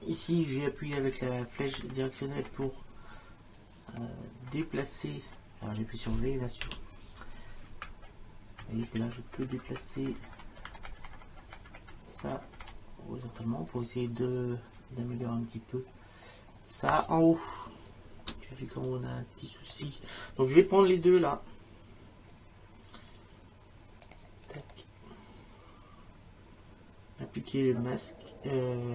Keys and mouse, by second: 1.7 Right, 3.9 click, 4.5 Right, 6.6 v, 7.8 Left, 9.9 Right, 18.3 space, 18.9 click, 19.7 space, 24.1 click, 24.6 right click.